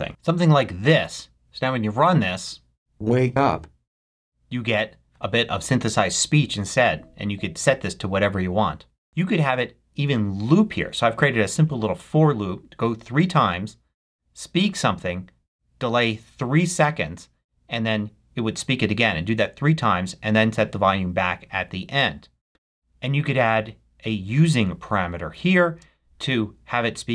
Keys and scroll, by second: 25.9 space.